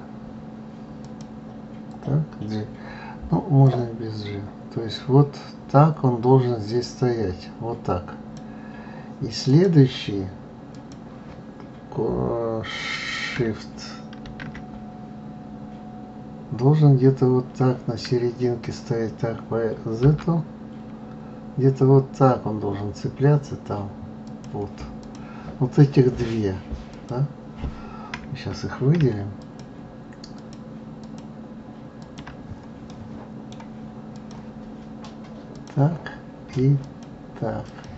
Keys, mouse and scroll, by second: 1.0 click, 3.6-6.6 drag, 9.4 click, 10.7 click, 14.2 shift+d, 25.0 click, 26.8 click, 29.3 shift+click, 31.0 shift+click, 32.0 shift+click, 32.9-34.1 middle drag, 34.1 click, 35.5 click, 36.8 shift+click, 37.6 shift+click.